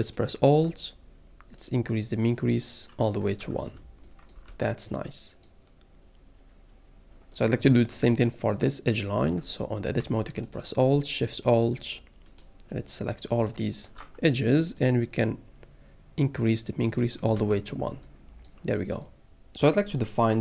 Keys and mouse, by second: 0.0 alt+click, 1.6-3.1 drag, 3.4 Tab, 4.5 alt+a, 9.2 Tab, 11.4-12.4 alt+shift+drag, 13.3 alt+shift+click, 14.9-17.1 drag, 17.3 Tab.